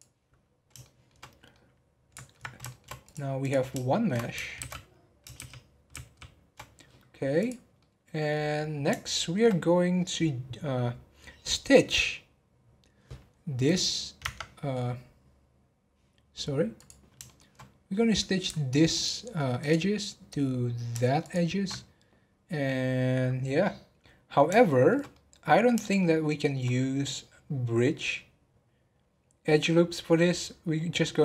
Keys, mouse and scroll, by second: 0.8-3.0 middle drag, 3.0 click, 3.4 click, 3.9 shift+middle click, 4.5 shift+s, 5.3 shift+s, 7.4 click, 7.7-8.5 middle drag, 8.5-9.0 scroll up 1, 9.0-12.1 shift+middle drag, 13.2-13.6 scroll up 1, 13.6 click, 14.2 Tab, 16.8 click, 17.2-18.9 shift+middle drag, 18.9 alt+click, 19.5 alt+click, 21.2 alt+shift+click, 24.6-29.0 shift+middle drag.